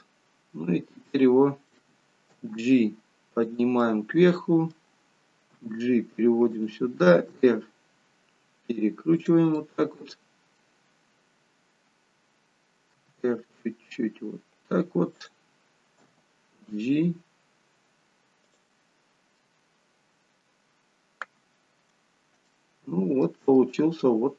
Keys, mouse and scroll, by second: 0.3-0.8 scroll down 1, 1.0 middle click, 1.0-2.3 scroll down 3, 2.3 g, 3.8 middle click, 5.6 g, 7.1 r, 9.5 middle click, 19.0-20.7 scroll up 4, 19.4 middle click, 20.7-21.4 scroll up 1, 21.4-22.0 scroll down 1, 22.0-23.7 scroll down 2, 22.5 shift+middle click, 23.7 middle click.